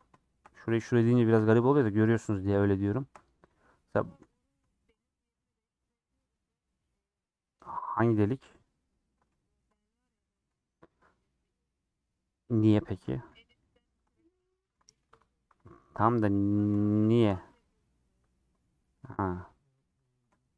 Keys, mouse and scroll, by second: 0.2-1.2 shift+middle drag, 1.2 shift+click, 1.4 middle click, 2.1 shift+click, 2.4 shift+click, 3.6 middle click, 4.3 click, 4.6 shift+middle click, 5.2-8.2 middle drag, 9.3 3, 9.4 middle click, 10.6-13.6 middle drag, 13.6 ;, 14.2 middle click, 14.6 3, 16.1 click, 16.3 middle click, 17.2 shift+click, 17.7 middle click, 18.6 scroll up 2, 18.8 middle click, 19.3 scroll up 3, 19.6 middle click, 20.4 scroll up 1, 20.5 middle click.